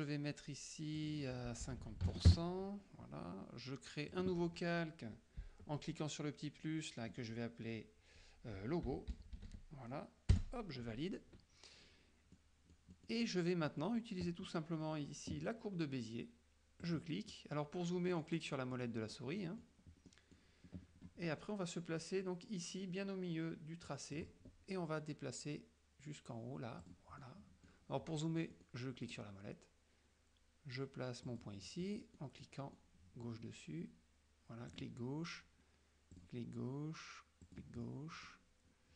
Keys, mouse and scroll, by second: 1.1 click, 1.9 ctrl+a, 2.1 ctrl+KP_5, 2.4 ctrl+KP_Enter, 4.2 click, 8.8-10.1 typing, 10.4 Return, 12.5 click, 13.3 click, 13.8 click, 16.9 click, 17.4 click, 18.2 click, 18.8 click, 19.3 click, 19.8 middle click, 20.2 middle click, 21.3 middle click, 24.3 click, 26.9 click, 27.3 middle click, 27.8 click, 28.6 click, 29.1 click, 31.3 click, 31.9 click, 32.1 middle click, 33.0 middle click, 34.8 click, 36.2 click, 37.5 click, 37.9-38.6 middle drag.